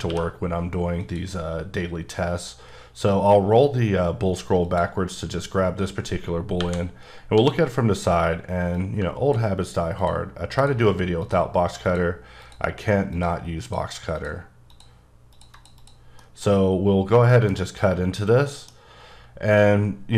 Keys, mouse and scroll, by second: 0.0 q, 1.0 click, 5.7-6.6 scroll down 1, 6.6 KP_1, 7.3 d, 7.9 click, 8.7 click, 10.6 ctrl+double click, 11.2 ctrl+click, 11.9 ctrl+click, 12.4 ctrl+double click, 13.1 click, 13.6 click, 14.1 double click, 14.7 click, 15.3 click, 15.5 double click, 15.9 click, 16.2 middle click, 17.3 middle click, 18.5 middle click, 18.8-20.1 scroll up 1.